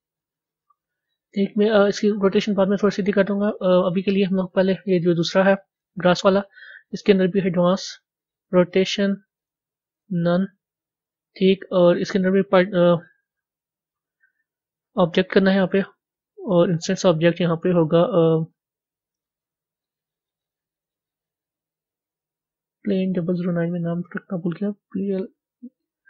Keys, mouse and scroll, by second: 5.8 click, 6.9 click, 8.4 click, 9.9-14.9 drag.